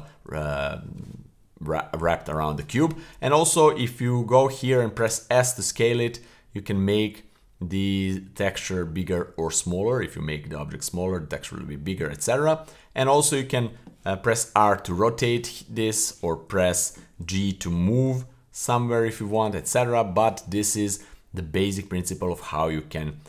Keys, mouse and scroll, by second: 0.4 middle click, 2.6 a, 5.0 s, 14.3 r, 18.1 g, 21.4-22.2 middle drag.